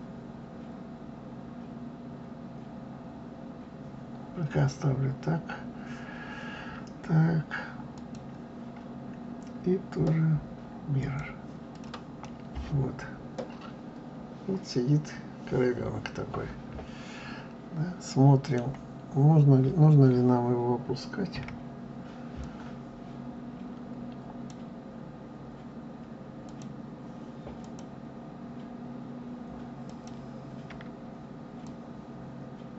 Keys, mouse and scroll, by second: 7.9-10.8 drag, 11.7 click, 12.2-15.2 middle drag, 21.3 KP_1, 22.4 click, 26.4 click, 27.6 click, 29.8 click, 31.6 drag.